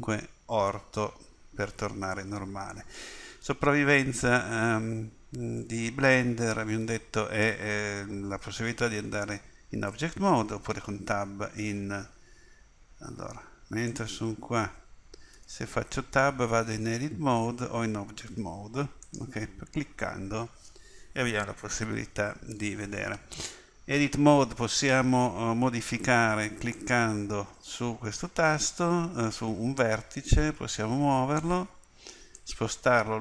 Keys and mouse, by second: 0.0 KP_5, 7.4-10.0 middle drag, 10.7 Tab, 12.1 Tab, 13.9-15.0 drag, 15.4 Tab, 16.8 Tab, 18.3 Tab, 19.0-21.5 drag, 26.8-30.7 middle drag.